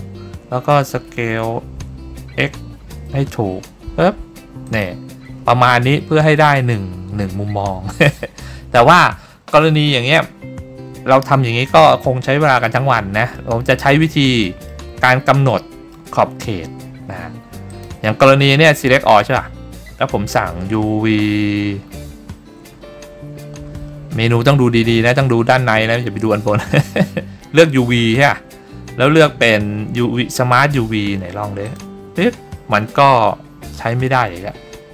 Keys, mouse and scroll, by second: 1.3 s, 1.9 y, 3.2 x, 4.8 click, 13.5 middle click, 14.6 middle click, 15.6 shift+middle click, 17.8 click, 18.6 a, 22.3-22.8 scroll down 2, 22.8-25.4 scroll up 8, 27.1 scroll up 1, 27.3-28.3 scroll down 1, 28.3-31.9 drag.